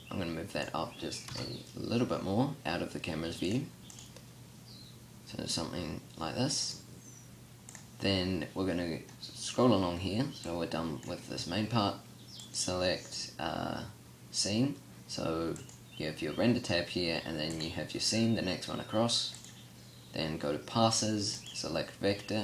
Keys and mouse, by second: 1.3 KP_0.